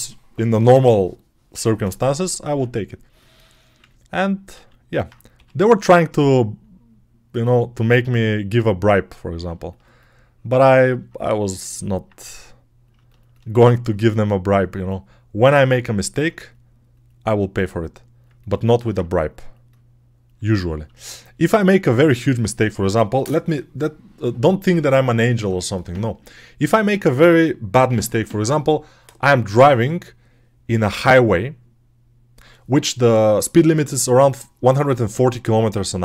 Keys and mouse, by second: 4.4 alt+q, 5.2 g, 11.7-12.8 alt+right drag, 18.1-36.0 alt+drag.